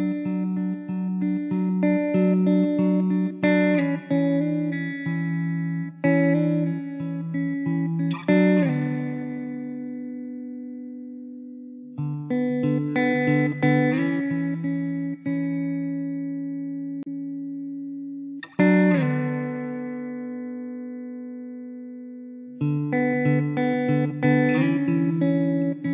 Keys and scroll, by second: 1.7 alt+z.